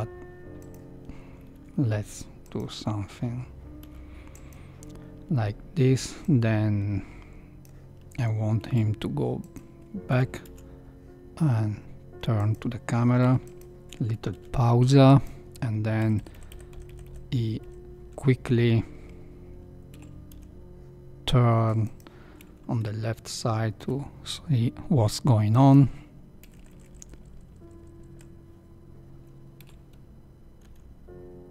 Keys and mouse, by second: 1.5 g, 3.8 i, 6.2-7.6 drag, 8.6 r, 10.1 r, 13.1 i, 13.7 Right, 14.3 i, 16.0 Right, 16.1 Right, 16.3 Right, 16.5 Right, 16.7 Right, 16.9 Right, 17.0 Right, 17.6 Right, 19.9 r, 23.7 i, 26.4 Right, 26.6 Right, 26.8 Right, 27.0 Right, 27.1 Right, 27.3 Right, 27.4 Right, 27.8 Right, 27.9 Right, 28.1 Right, 29.6 r.